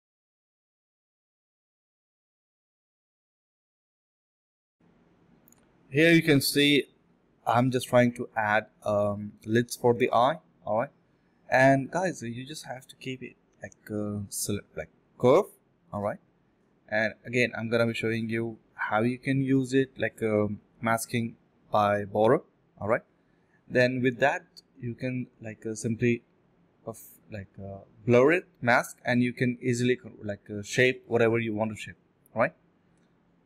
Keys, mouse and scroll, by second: 2.5 alt+click, 2.7 alt+click, 2.8 alt+double click, 4.5 alt+double click, 4.7 alt+click, 5.4 ctrl+b, 6.0-6.3 typing, 6.6 double click, 7.3 alt+click, 9.4 double click, 9.7-11.0 typing, 12.5 typing, 14.3 typing, 14.7 ctrl+shift+click, 14.9 ctrl+z, 15.1 ctrl+shift+click, 15.3 ctrl+z, 15.4 ctrl+shift+click, 17.9 ctrl+shift+x, 18.0 ctrl+shift+x, 19.9 alt+click, 20.1 alt+click, 20.2 alt+click, 22.3 ctrl+shift+click, 22.7 ctrl+shift+click, 23.2 ctrl+shift+click, 23.7 ctrl+shift+click, 24.9 alt+click, 25.7 ctrl+alt+shift+click, 26.0 alt+click, 28.4 ctrl+shift+click, 29.2-29.9 typing, 31.3 alt+click, 31.4 alt+double click, 31.7 alt+double click, 31.8 alt+double click, 32.2 f, 33.4 f.